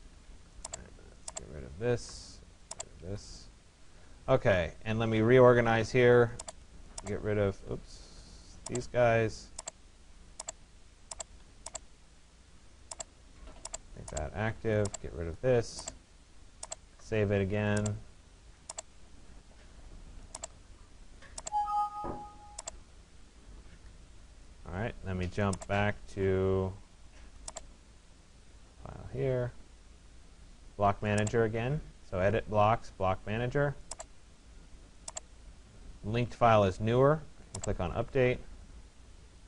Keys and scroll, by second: 1.6 Delete.